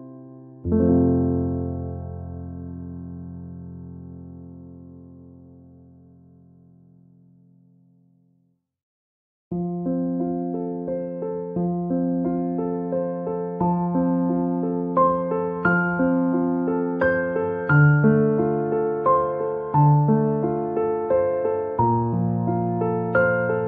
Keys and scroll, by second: 21.6 Return.